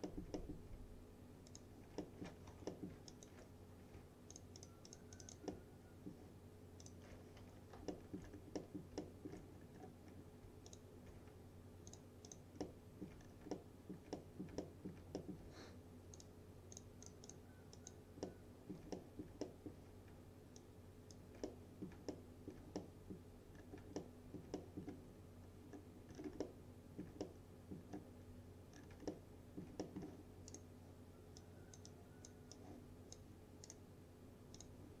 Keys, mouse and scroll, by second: 1.6 alt+click, 2.1 alt+middle click, 2.6 F3, 2.7 middle click, 3.2 alt+click, 4.4-5.6 alt+drag, 5.6-6.2 alt+middle drag, 6.9 alt+click, 7.5 F3, 8.0 alt+middle click, 8.3-8.6 scroll down 1, 8.6 middle click, 9.1 alt+middle click, 9.6 scroll up 1, 10.7 alt+click, 12.0 alt+click, 12.7-13.3 alt+middle click, 13.5 scroll down 1, 13.6-14.5 alt+middle click, 14.7 alt+middle click, 15.2 middle click, 16.2 alt+click, 18.3-18.9 alt+middle click, 19.5 alt+middle click, 20.6-21.2 alt+click, 21.5-22.1 middle click, 22.2-22.8 alt+middle click, 22.8-23.5 middle click, 23.6 scroll down 1, 24.0-24.9 alt+middle click, 25.2 scroll up 2, 26.2 scroll down 2, 26.5-27.1 alt+middle click, 27.3-27.9 middle click, 28.3 scroll up 1, 28.8 scroll down 1, 29.2-29.8 alt+middle click, 30.6 right click, 31.5-32.6 click, 31.9 click, 32.6-33.5 click, 33.7 right click, 34.6 click.